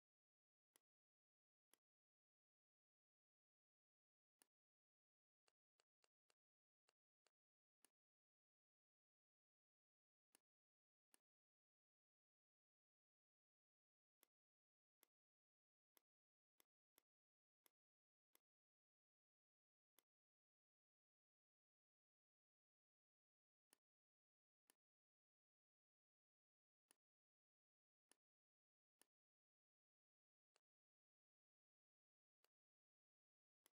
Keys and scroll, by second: 5.7 z, 5.9 space, 6.1 v, 12.1 a, 17.8 v, 21.2 ctrl+g, 32.4 space, 33.4 v.